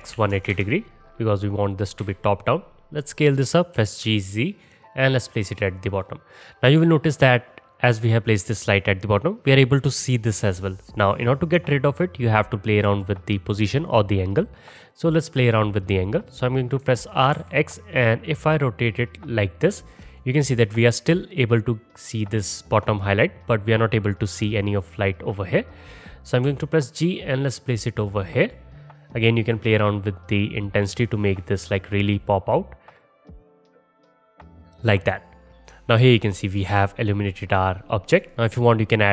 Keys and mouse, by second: 2.0 s, 3.7 g, 12.0-13.9 alt+drag, 13.9-29.7 middle drag, 16.8 r, 26.5 g, 29.7-35.5 drag, 35.5-36.6 alt+right drag, 36.6-38.3 drag, 39.0-39.1 middle drag.